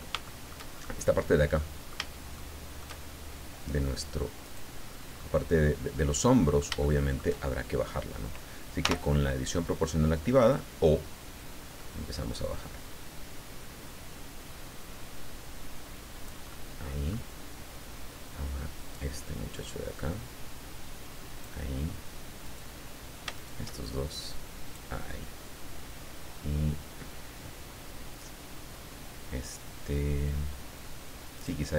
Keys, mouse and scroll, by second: 0.2 shift+middle click, 0.7-1.0 shift+scroll down 1, 1.0 shift+scroll up 1, 1.6 middle click, 2.3 shift+middle click, 4.4 right click, 5.1 scroll down 1, 5.1-6.8 middle drag, 8.8 o, 10.5-11.6 drag, 11.6-11.9 scroll up 1, 14.8-15.2 scroll up 1, 16.5 middle click, 18.7 middle click, 19.5-21.6 drag, 22.4 middle click, 23.3 shift+middle click, 24.1 click, 31.4 middle click.